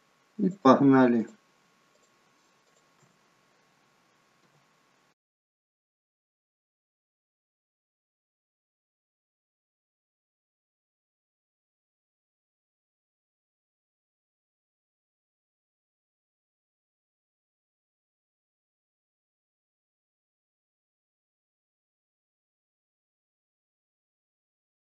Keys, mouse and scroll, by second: 0.4 click, 1.2 shift+click, 2.0 click, 2.7 click, 4.4 f, 5.3 click, 5.6 shift+click, 5.8 shift+click, 5.9 shift+click, 6.2 f, 6.4 click, 6.6 shift+click, 6.8 click, 7.1 shift+click, 7.3 f, 7.7 click, 7.9 shift+click, 8.1 shift+click, 8.3 shift+click, 8.5 f, 8.8 click, 9.0 shift+click, 9.2 click, 9.4 shift+click, 9.6 f, 9.9 click, 10.1 shift+click, 10.3 shift+click, 10.5 shift+click, 10.8 f, 11.1 click, 11.3 shift+click, 11.5 shift+click, 11.7 shift+click, 11.8 f, 12.2 click, 12.5 shift+click, 12.7 shift+click, 12.9 shift+click, 13.1 f, 13.3 click, 13.5 shift+click, 13.7 click, 13.9 shift+click, 14.3 f, 14.6 click, 14.8 shift+click, 15.1 click, 15.3 shift+click, 15.5 f, 15.7 click, 15.9 shift+click, 16.0 shift+click, 16.2 shift+click, 16.4 f, 16.7 click, 16.9 shift+click, 17.1 shift+click, 17.3 shift+click, 17.6 f, 17.8 click, 18.1 shift+click, 18.2 click, 18.3 shift+click, 18.6 f, 19.0 click, 19.2 shift+click, 19.3 shift+click, 19.4 shift+click, 19.7 f, 21.6 shift+click, 21.7 shift+click, 21.8 shift+click, 22.2 f, 22.4 click, 23.2 ctrl+z, 23.4 ctrl+z, 24.6 scroll down 3.